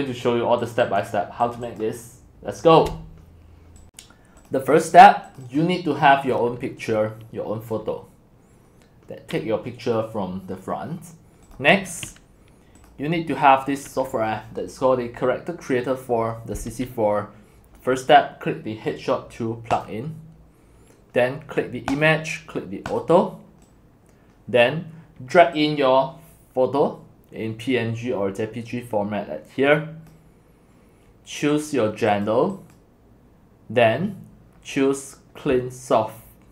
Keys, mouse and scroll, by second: 0.6 click, 1.4 click, 1.7 click, 3.8 click, 4.2-4.6 drag, 5.6 click, 6.0 click, 19.9-23.3 drag, 23.7-26.7 drag, 27.1-30.1 drag, 31.5 click, 32.5 click, 33.1 click.